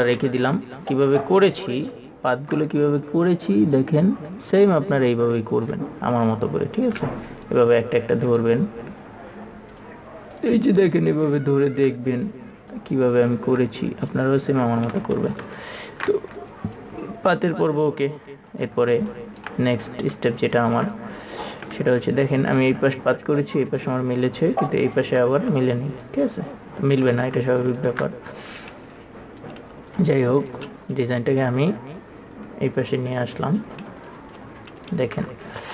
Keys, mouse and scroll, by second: 1.0 click, 2.3 ctrl+space, 2.5 click, 4.7-6.3 drag, 8.0 click, 8.8 right click, 10.1 click, 12.0 ctrl+z, 13.1 click, 13.8 ctrl+z, 14.2 click, 15.2 click, 15.3 ctrl+space, 16.9 click, 19.5 ctrl+click, 22.5 ctrl+click, 23.8 click, 28.0-34.0 ctrl+super+drag, 34.4 click.